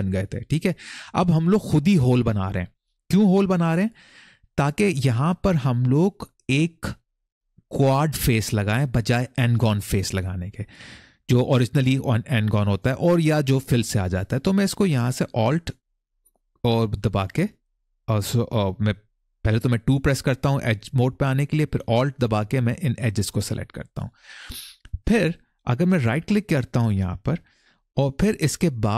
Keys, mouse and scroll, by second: 2.7 middle click, 15.6 alt+click, 16.9 alt+click, 19.5-20.2 typing, 22.6 alt+click, 23.7-24.4 scroll up 1, 25.9-28.9 right drag.